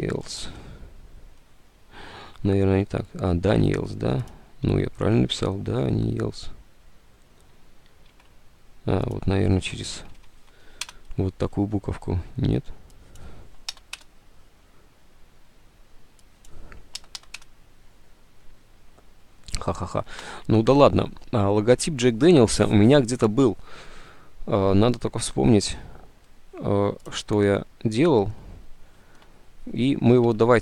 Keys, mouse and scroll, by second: 0.0-0.7 typing, 2.3 alt+Tab, 3.6 alt+Tab, 8.2 alt+Tab, 10.0 Left, 10.7 End, 10.9 Return, 13.8 BackSpace, 14.0 Return, 17.1 Return, 17.3 BackSpace, 17.3 BackSpace, 17.5 Return, 17.6 BackSpace, 20.4 alt+Tab, 29.1 alt+Tab.